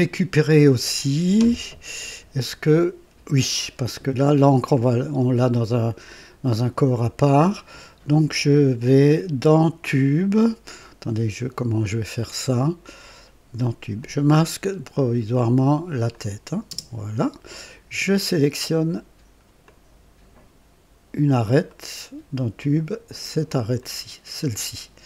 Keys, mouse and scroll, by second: 0.3 right click, 3.9-4.2 scroll down 1, 13.9 click, 16.0 click, 16.7 space, 19.6-21.5 drag, 21.6 right click, 23.7 click.